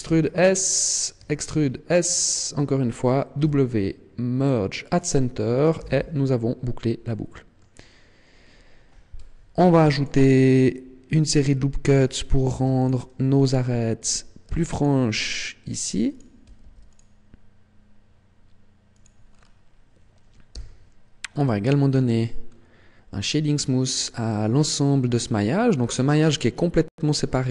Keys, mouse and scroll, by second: 0.9 click, 1.2 e, 3.1 click, 3.4 w, 5.8 z, 6.2-7.0 scroll down 1, 7.0 middle click, 7.0 scroll down 1, 8.4-8.8 scroll up 3, 9.6 ctrl+r, 11.4 click, 12.4 ctrl+r, 14.0 click, 14.6 ctrl+r, 16.2 click, 16.6 ctrl+r, 19.0 click, 19.2-20.5 scroll down 4, 20.5 t, 22.0-22.5 scroll up 6, 23.5-24.0 scroll down 3, 24.0-24.4 scroll up 3, 24.6-25.2 scroll down 2, 25.7 scroll down 2, 26.9 right click.